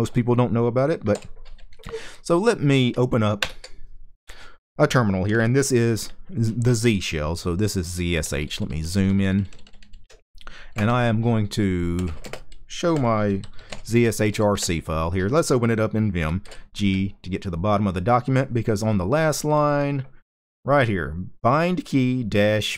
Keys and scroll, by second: 0.8 super+h, 3.1 super+Return, 7.9 ctrl+shift+k, 8.1 ctrl+shift+k, 8.2 ctrl+shift+k, 8.4 ctrl+shift+k, 8.5 ctrl+shift+k, 8.6 ctrl+shift+k, 8.8 ctrl+shift+k, 8.9 ctrl+shift+k, 9.1 ctrl+shift+k, 9.2 ctrl+shift+k, 9.6 ctrl+shift+k, 11.4-14.5 typing.